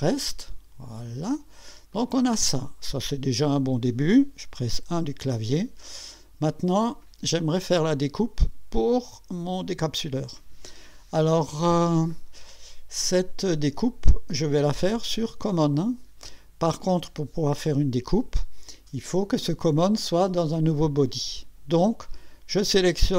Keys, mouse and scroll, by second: 1.9-4.0 drag, 4.7 1, 5.5 scroll up 1, 6.1 right click, 15.2 click.